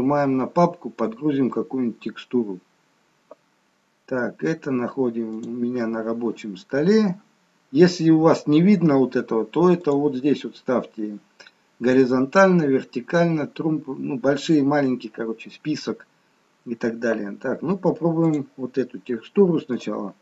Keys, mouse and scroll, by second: 2.3 click.